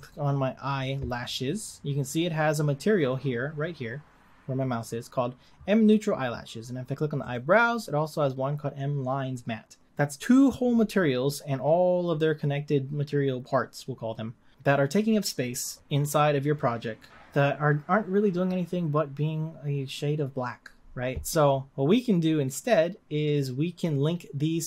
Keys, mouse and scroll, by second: 0.1 click, 1.4-1.8 scroll up 2, 2.2-7.2 scroll down 1, 7.4 click.